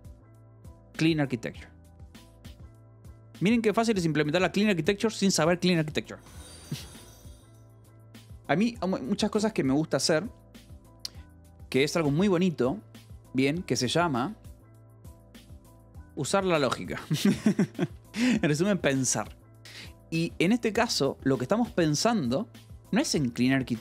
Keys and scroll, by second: 11.9 k, 12.6 l, 14.5-18.1 typing, 21.2 j, 22.4 j.